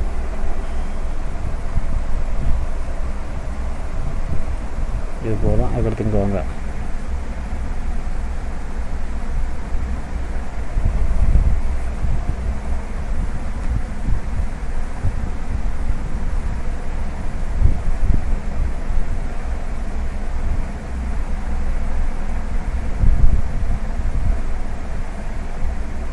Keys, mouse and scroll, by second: 2.7 middle click, 4.4 middle click, 4.9 click, 5.2 middle click, 5.6-7.2 scroll up 2, 7.2 click, 7.2 scroll up 1, 10.5 middle click, 12.4 middle click, 12.8-13.6 scroll up 1, 13.6-14.0 scroll up 1, 14.0 shift+click, 16.0-17.0 scroll down 2, 17.1 e, 19.9 ctrl+z, 21.7 shift+click, 22.8 e, 25.5 KP_7.